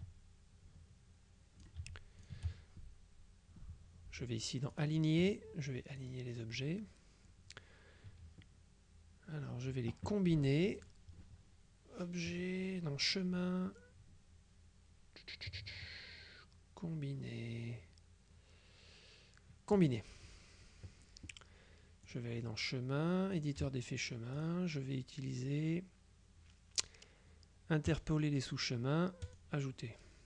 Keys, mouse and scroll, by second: 2.3 shift+click, 4.8 click, 6.1 click, 13.2 click, 19.8 click, 22.2 click, 23.4 click, 24.5 click, 28.0 click, 29.3 click.